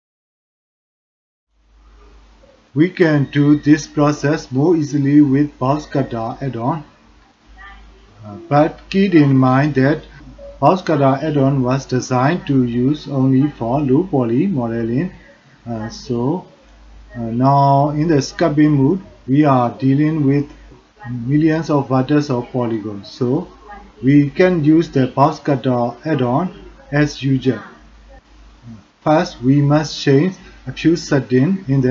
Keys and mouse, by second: 0.0 middle click, 0.1 shift+click, 0.2 middle click, 0.4 shift+middle click, 0.6 middle click, 1.2 shift+middle click, 1.9 middle click, 3.1 shift+middle click, 4.6 drag, 4.9 middle click, 6.4-6.8 middle drag, 8.5 middle drag, 9.7 shift+middle drag, 12.8 click, 13.5 shift+click, 14.0 click, 15.0 shift+drag, 15.5 click, 16.4 drag, 17.7 shift+click, 18.1 click, 19.1-19.4 middle drag, 20.7 middle click, 23.4 middle click, 24.4 middle click, 26.5 click, 28.5-29.0 drag, 30.3 click.